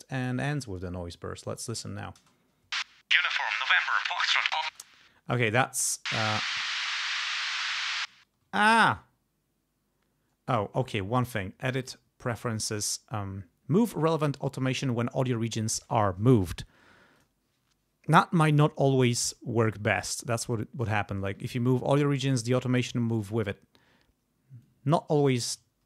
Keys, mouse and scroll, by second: 0.2 click, 1.5 click, 2.2 space, 4.6 space, 5.4 click, 6.3 click, 6.8 click, 7.8 ctrl+z, 8.6 ctrl+click, 11.3 click, 12.2 click, 17.1 click, 19.6 click, 20.3 click, 21.3 ctrl+z, 21.6 ctrl+click, 23.2 ctrl+z, 24.6 click.